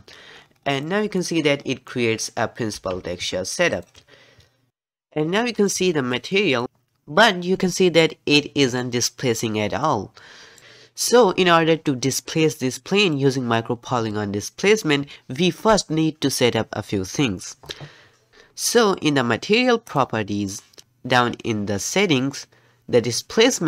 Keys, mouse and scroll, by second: 0.5-1.2 scroll down 6, 1.2-1.7 middle drag, 1.7-2.0 scroll down 1, 2.0 middle click, 2.6 scroll down 1, 2.9 g, 5.1-7.6 middle drag, 9.8-10.6 middle drag, 10.6-15.1 middle drag, 20.0 click, 21.2-23.6 scroll down 11.